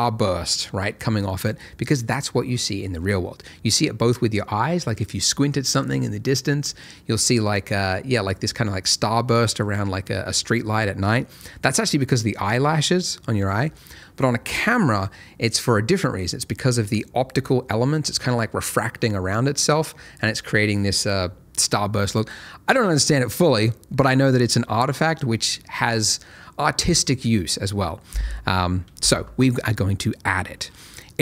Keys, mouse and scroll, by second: 30.3 middle click.